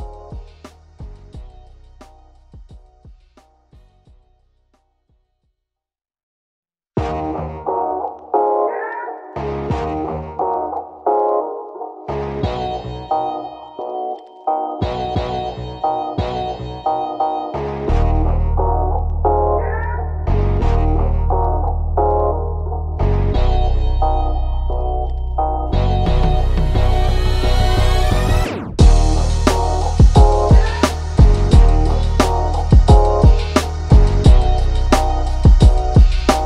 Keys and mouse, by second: 0.7 click, 2.1 click, 2.3 ctrl+z, 2.5 click, 4.8 click, 5.8-7.7 drag, 7.7 ctrl+z, 8.1-11.7 drag, 11.7 click, 14.5 ctrl+z, 14.8-18.1 drag, 18.3 click, 19.4 click, 20.5 ctrl+=, 21.1 click, 21.5 ctrl+z, 22.1-23.8 drag, 25.2-28.4 drag, 28.4-31.8 drag, 33.5-35.5 drag, 35.5 ctrl+0, 36.1 click.